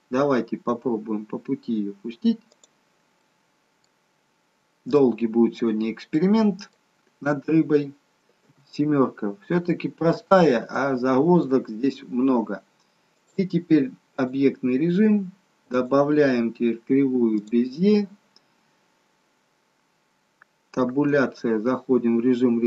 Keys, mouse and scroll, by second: 2.5 click, 3.2 middle click, 4.2-5.1 scroll down 4, 5.1 middle click, 6.2 middle click, 6.2 scroll down 1, 8.4 KP_7, 9.4-10.6 scroll up 5, 10.7 shift+middle click, 11.6-12.1 scroll down 2, 13.2 click, 15.9 click, 20.9 Tab.